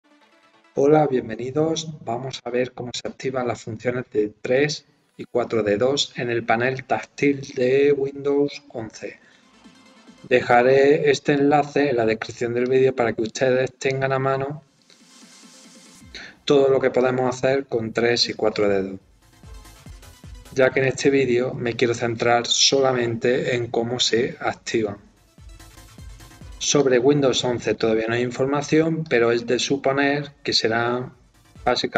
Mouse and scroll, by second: 11.3 right click, 12.6 click, 13.7 scroll up 2, 14.7 scroll down 2, 17.1 scroll up 2, 26.7 click, 27.7 scroll up 2, 28.2 scroll down 2, 28.3 scroll up 2, 29.0 click, 29.7 scroll down 2, 30.4 scroll up 2.